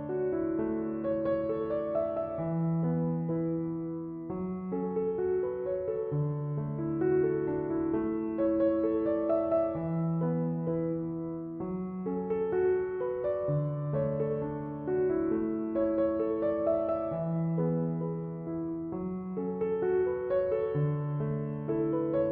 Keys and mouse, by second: 8.7 click, 14.7 click.